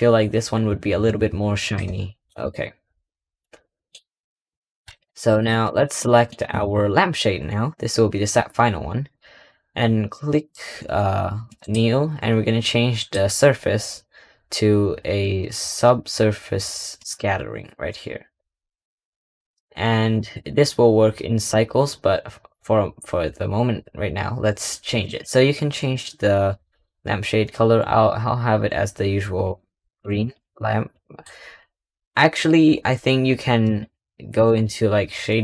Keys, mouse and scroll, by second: 1.9 scroll down 1, 2.1 Tab, 2.5 scroll down 2, 2.7-3.3 scroll up 4, 3.3-3.8 middle drag, 3.8-4.7 scroll down 10, 4.7 click, 5.2 click, 5.5 click, 5.9-8.9 middle drag, 11.5-16.0 drag, 18.0-18.7 scroll down 2, 18.7-20.1 middle drag, 20.1-21.1 scroll up 3, 21.1-21.7 middle drag, 21.7-24.9 scroll up 2, 24.9 click, 29.9 click, 30.2-30.8 scroll down 6, 30.8-31.3 middle drag, 31.3-32.7 scroll up 6, 34.1 click.